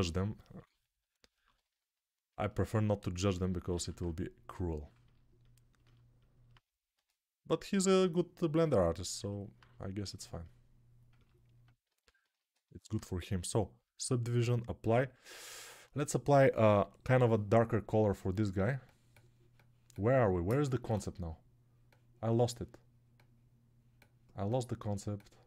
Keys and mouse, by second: 3.7 alt+q, 11.8 alt+q, 12.4 alt+shift+middle click.